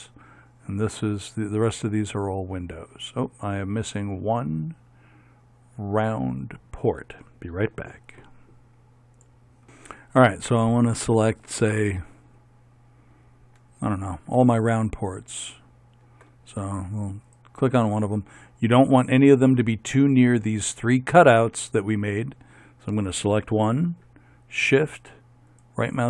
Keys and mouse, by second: 15.4-19.1 right drag, 25.7-26.0 right drag.